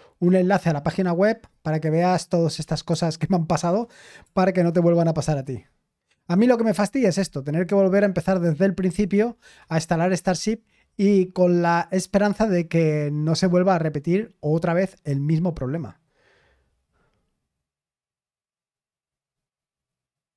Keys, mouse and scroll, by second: 2.6 ctrl+p, 2.9 ctrl+p, 4.2 Return.